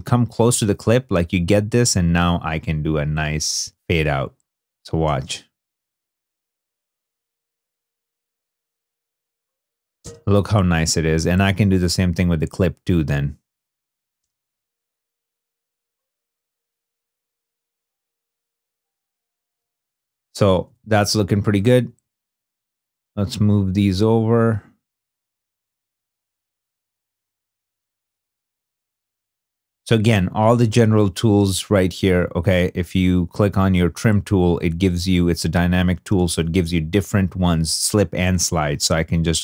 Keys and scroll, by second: 4.9 shift+space, 9.9 shift+space, 14.1 shift+space, 19.4 shift+space, 20.4 shift+i, 21.7 shift+2, 35.1 shift+2, 36.0 shift+i.